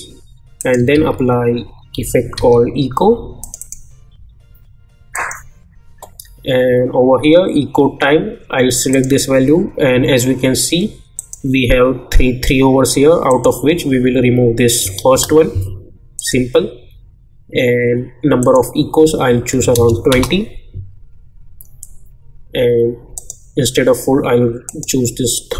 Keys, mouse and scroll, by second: 1.1 ctrl+a, 1.3-2.8 typing, 3.4 click, 8.9 click, 11.1 click, 16.1 click, 18.4 click, 20.1 Return, 23.1 click.